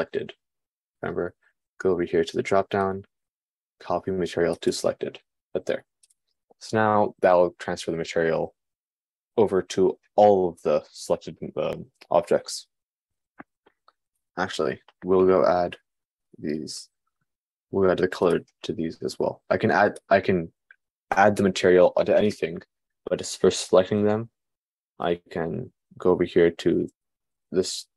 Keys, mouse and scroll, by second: 16.7 shift+click, 20.3 shift+click, 20.4-27.9 shift+middle drag.